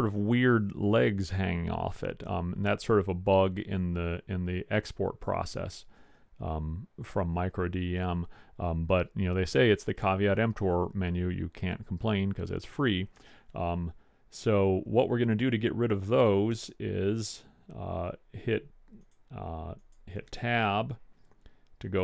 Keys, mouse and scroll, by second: 11.8-13.7 middle drag.